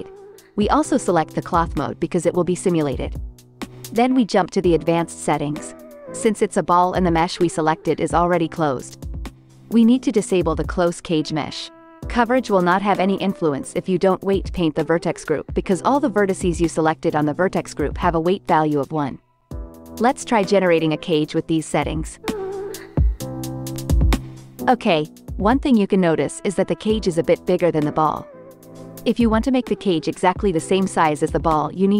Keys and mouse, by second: 0.0 click, 1.0-2.1 drag, 5.0 click, 8.2 click, 12.6-24.4 drag, 24.7 click, 27.5 x, 29.2-31.9 drag.